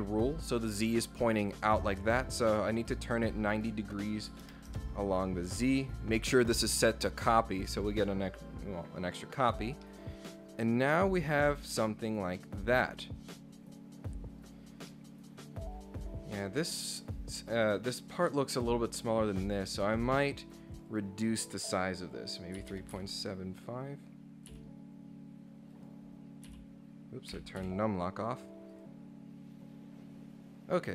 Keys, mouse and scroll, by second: 3.5 click, 4.7 Return, 8.3 click, 9.4 click, 9.8-14.1 middle drag, 14.6 scroll down 2, 14.9 middle click, 19.7 click, 20.7 click, 20.9 click, 25.7 click, 28.7 click, 30.3 scroll up 1.